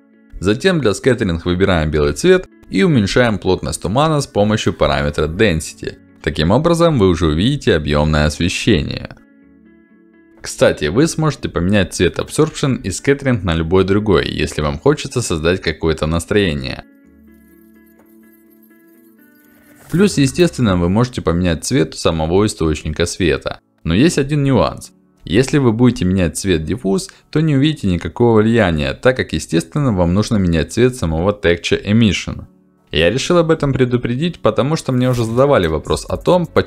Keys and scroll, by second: 6.5-8.1 typing, 6.7 Return, 7.2 Return, 8.2 Return.